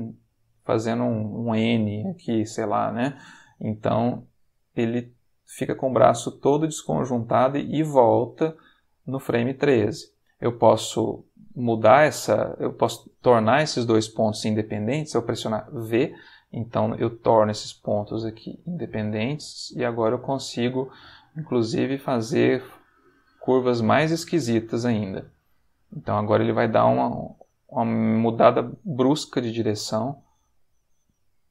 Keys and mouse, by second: 2.4-9.9 drag, 10.1 click, 15.6 v, 16.9 click, 17.8 ctrl+middle click, 18.9 click, 19.2 g, 21.2 click, 21.8 click, 21.9 g, 22.8 click, 23.3 ctrl+middle click, 24.1-25.2 ctrl+middle drag, 25.7-31.5 drag.